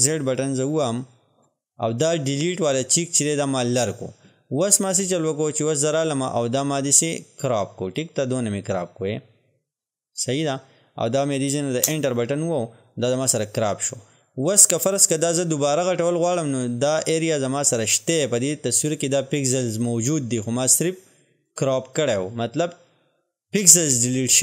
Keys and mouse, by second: 0.7 ctrl+z, 3.8 click, 8.2-11.9 drag, 11.9 Return, 14.5-21.5 drag, 21.5-24.4 drag.